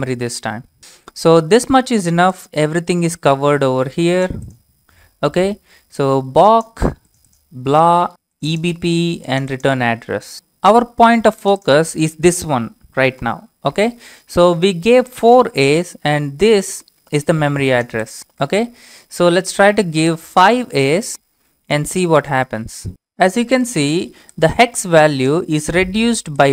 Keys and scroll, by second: 0.0 1, 0.8 Return, 19.5 Up, 20.2 a, 21.1 Return, 22.2 y, 22.3 Return.